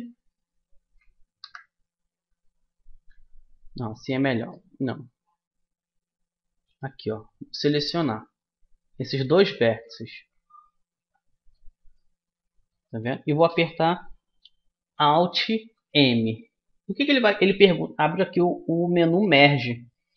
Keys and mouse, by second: 0.4 click, 0.7-1.7 right drag, 1.5 KP_3, 1.7 click, 2.9 KP_1, 3.9 middle click, 4.5 click, 8.9 click, 9.6-15.7 middle drag, 15.7 alt+m.